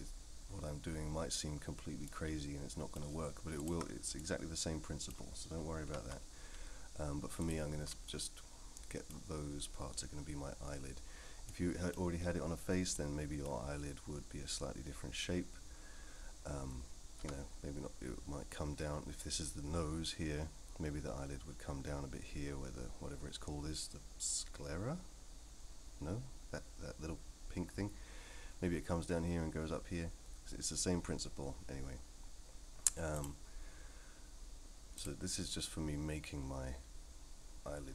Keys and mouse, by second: 2.1 middle click, 3.6 ctrl+click, 4.2 middle click, 7.4 ctrl+click, 8.1-9.1 middle drag, 11.5 middle click, 13.0 middle click, 17.2 KP_1, 33.2-37.9 drag.